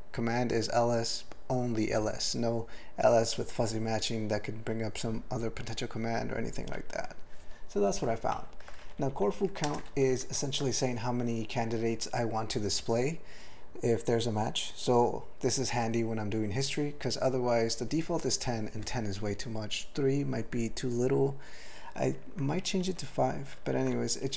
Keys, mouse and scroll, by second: 8.4 ctrl+n, 8.8 alt+b, 9.0 alt+b, 9.2 alt+b, 9.7 ctrl+space, 9.9 ctrl+alt+f, 10.2 ctrl+g, 22.6 ctrl+f, 22.8 ctrl+f, 23.5 ctrl+f.